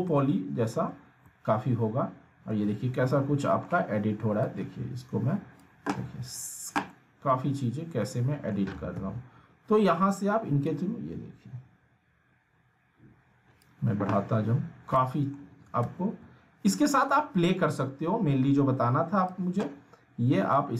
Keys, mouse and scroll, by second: 0.0-1.0 alt+middle click, 0.9-1.2 scroll up 1, 1.2-2.8 alt+middle drag, 2.9 scroll down 1, 3.1-3.7 alt+middle drag, 4.4-5.7 drag, 6.9-8.7 alt+middle drag, 9.0 ctrl+z, 10.7-13.8 drag, 14.9-15.6 alt+middle click, 15.8 ctrl+z, 17.0-19.2 drag, 20.0 scroll up 1, 20.5-20.7 alt+middle drag.